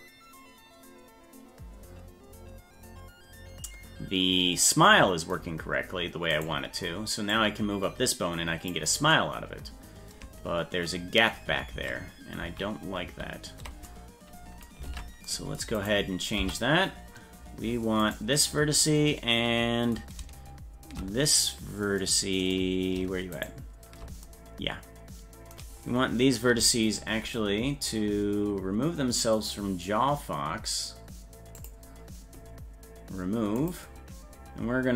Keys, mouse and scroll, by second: 6.4 right click, 7.3-8.7 drag, 11.8 ctrl+z, 13.0 ctrl+z, 13.1 ctrl+z, 14.9 ctrl+Tab, 15.8 right click, 16.4 Tab, 18.0 right click, 23.4 shift+right click, 31.6 click, 33.6 click.